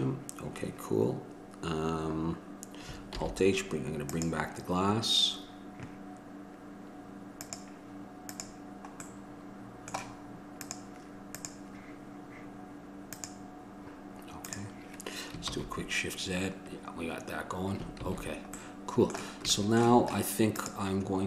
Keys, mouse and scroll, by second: 3.3 alt+h, 4.2-6.8 drag, 7.6-9.4 drag, 9.4 middle click, 10.8-15.7 drag, 15.7 shift+z, 18.3 shift+z, 20.8-21.2 drag.